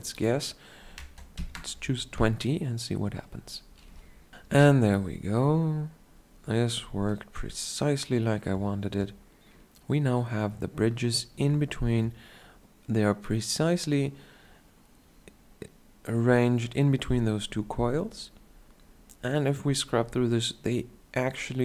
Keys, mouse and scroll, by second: 8.4 shift+scroll down 1, 17.9-20.1 drag.